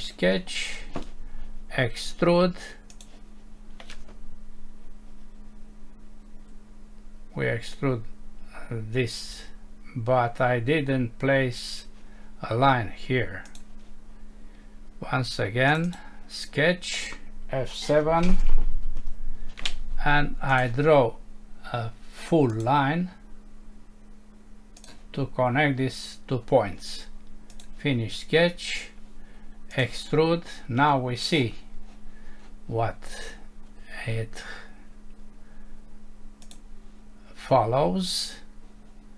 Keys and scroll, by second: 19.0 F7.